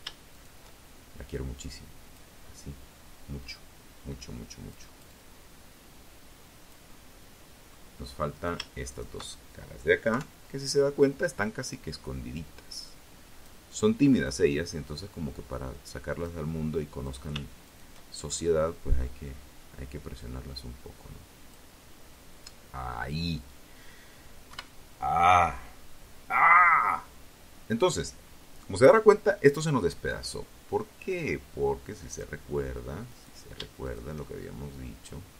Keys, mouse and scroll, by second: 1.6-5.0 drag, 5.1 middle click, 6.5 shift+right click, 7.0 shift+right click, 8.2 KP_3, 9.8-11.8 drag, 12.4-14.6 drag, 15.2 shift+right click, 15.8 shift+right click, 16.6-19.8 drag, 20.8 scroll up 1, 21.0-21.4 scroll down 1, 22.6 KP_1, 26.4-26.7 scroll up 2, 28.2-30.5 drag, 31.2 right click, 32.0 shift+right click, 32.6-34.1 shift+drag, 34.5 right click, 35.1 shift+right click.